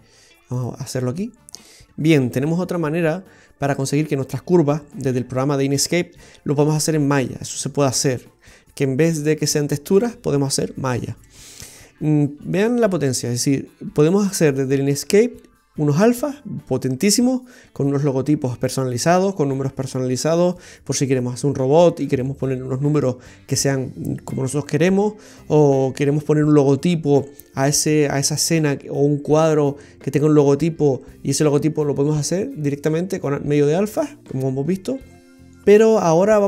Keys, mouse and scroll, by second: 1.7 middle click, 1.7 scroll up 5.